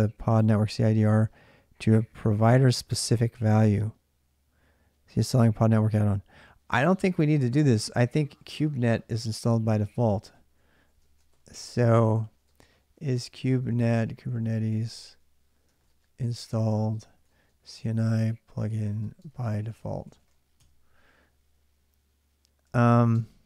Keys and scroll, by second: 9.5 alt+Tab, 10.8 ctrl+a, 11.1-11.8 typing, 13.1-20.9 typing, 22.2-23.4 typing.